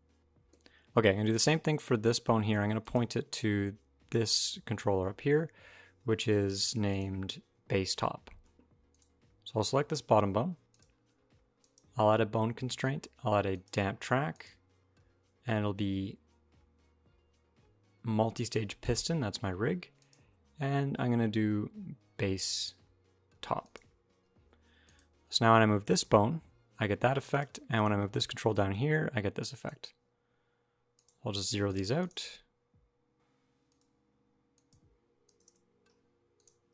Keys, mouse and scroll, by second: 1.0 click, 2.6 click, 6.7 click, 8.7 click, 10.5 click, 11.4 click, 14.1 click, 19.8 click, 24.6 click, 25.6 g, 27.5 click, 28.3 g, 30.7 click, 31.1 click, 31.8 click, 33.5 click, 34.3 click, 36.1 click.